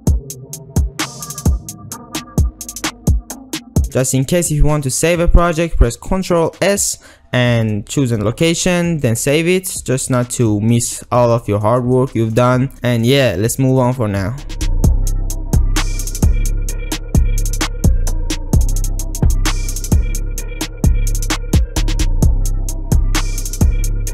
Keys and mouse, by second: 0.0-3.4 typing, 0.3 click, 1.1 alt+z, 1.5 ctrl+r, 1.7 ctrl+r, 3.8 ctrl+click, 7.0 ctrl+s, 14.9 ctrl+middle click, 15.1 shift+middle click, 15.2-24.1 typing, 15.3 click, 16.0 click, 16.6 click, 17.4 click, 17.8 ctrl+z, 17.9 ctrl+r, 18.8 click, 19.2 ctrl+s, 19.2 click, 19.3 ctrl+r, 21.1 ctrl+r, 23.5 Tab, 23.5 alt+shift+z, 23.5 ctrl+click, 23.5 alt+shift+z, 23.7 alt+shift+z, 24.0 ctrl+click.